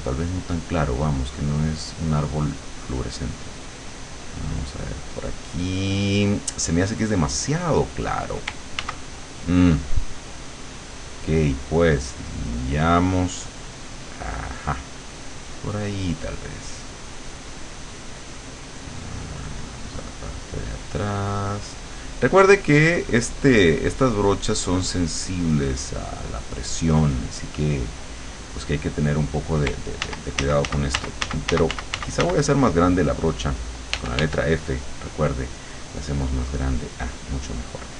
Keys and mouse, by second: 1.1 click, 4.2-6.9 drag, 8.9 ctrl+z, 10.9 click, 12.0 click, 12.5 click, 14.0-28.5 drag, 30.1 ctrl+z, 34.0 f, 36.2-37.9 drag.